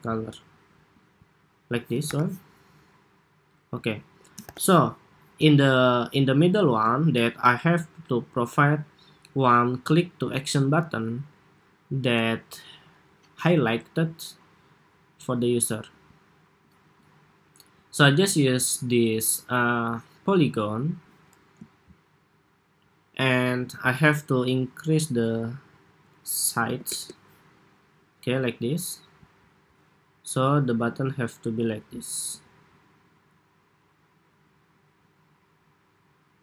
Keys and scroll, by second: 1.9 super+-, 4.2 super+=, 6.4 super+s.